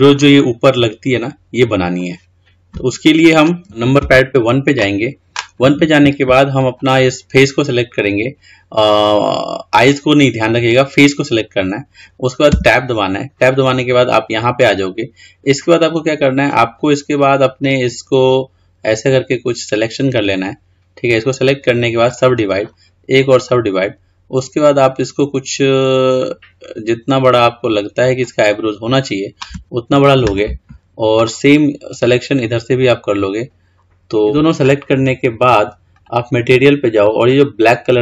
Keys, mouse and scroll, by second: 3.6 middle click, 4.3 KP_1, 7.0 click, 12.7 Tab, 17.4 click, 22.4 right click, 23.8-26.4 right drag, 26.4 click, 36.1 click, 37.5 click.